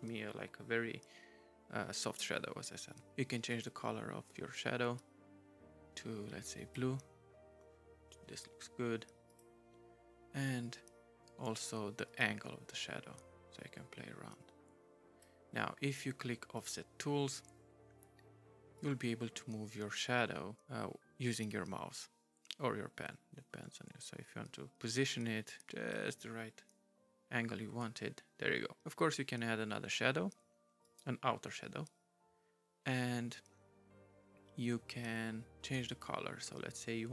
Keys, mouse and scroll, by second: 3.5 right click, 5.0 right click, 9.3 right click, 12.1 right click, 16.5 right click, 18.8 right click, 30.8 right click, 35.9 right click.